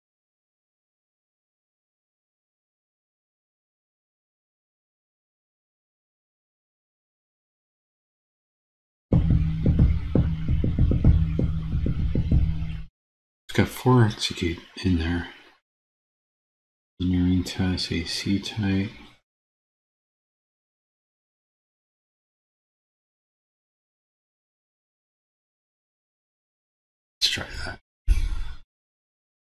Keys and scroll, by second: 29.3 super+c.